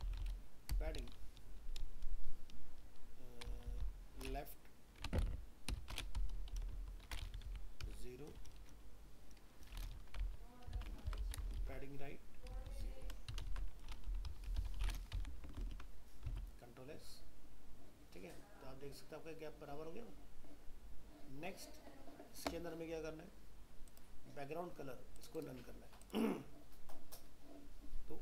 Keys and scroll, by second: 11.1 ctrl+c, 11.5 ctrl+Return, 11.6 ctrl+v, 13.5 ctrl+shift+Left, 15.6 ctrl+s, 16.3 alt+Tab.